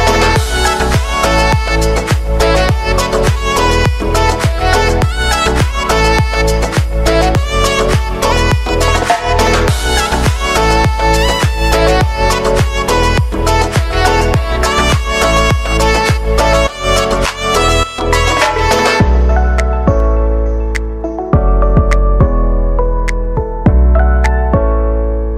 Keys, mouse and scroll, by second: 3.2 space, 9.8 space.